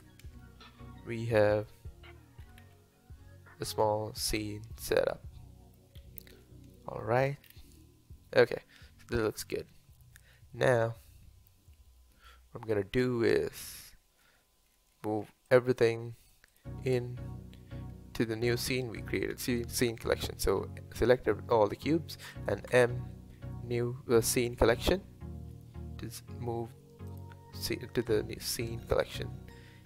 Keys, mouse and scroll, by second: 0.4-2.5 middle drag, 2.5 s, 4.7-6.0 middle drag, 6.0-6.4 scroll up 2, 6.4-7.4 middle drag, 7.4 scroll down 3, 9.4-12.4 middle drag, 15.5 click, 16.5 shift+click, 22.7 m, 29.0 click.